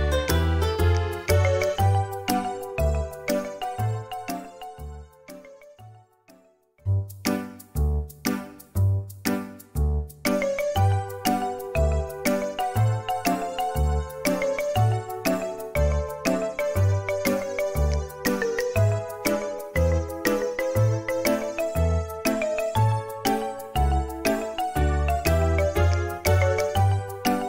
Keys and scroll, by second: 1.3 Delete, 1.3 Escape, 7.4 space, 8.2 m, 11.7 typing, 13.4 space, 17.3 space, 22.7-23.5 typing, 24.7 space.